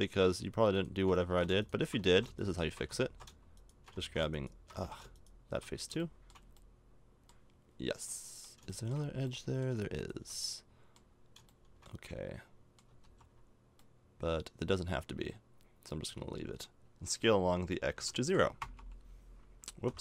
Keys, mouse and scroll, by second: 1.2-2.4 right drag, 1.3 ctrl+z, 2.1 ctrl+z, 3.0 ctrl+z, 4.0 ctrl+z, 4.8 ctrl+z, 9.4-13.0 middle drag, 13.0 ctrl+z, 17.1 s.